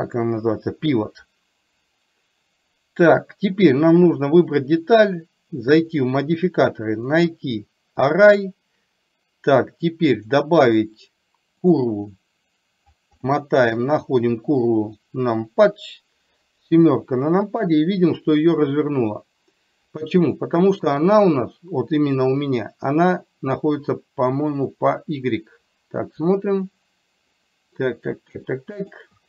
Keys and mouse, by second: 7.1 click, 10.4 click, 13.8 click, 16.9 KP_7, 20.9 click, 28.6 shift+middle click.